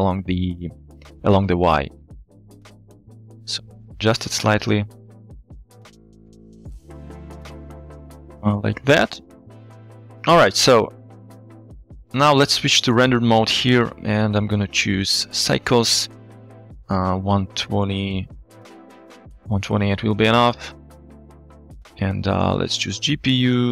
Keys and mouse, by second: 2.3-4.8 shift+middle drag, 4.8-8.7 shift+drag, 10.9-11.5 middle drag, 12.3 z, 15.2-15.8 drag, 16.5-18.6 drag, 20.8 click, 22.5-23.1 drag, 23.6-23.7 drag.